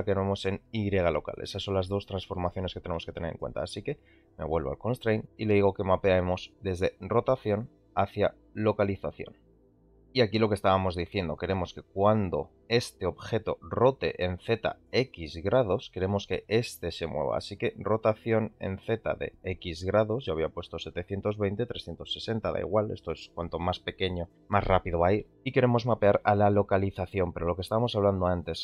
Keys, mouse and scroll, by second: 0.4 g, 2.9-3.3 middle drag, 8.8 click, 13.3 r, 19.4-25.0 drag.